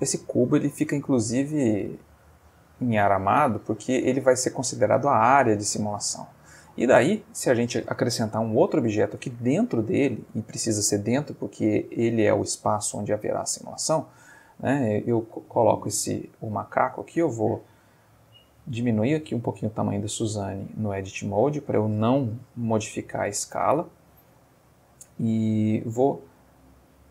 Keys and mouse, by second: 1.8-2.6 ctrl+middle drag, 3.2-4.2 middle drag, 6.5-7.6 middle drag, 8.5 shift+a, 13.0 click, 14.5-16.1 middle drag, 16.5 Tab, 16.9 s, 18.1-21.2 drag, 18.6-21.2 middle drag, 21.4 Tab, 22.4 n, 24.5-25.1 ctrl+middle drag, 25.8 click, 26.5 click.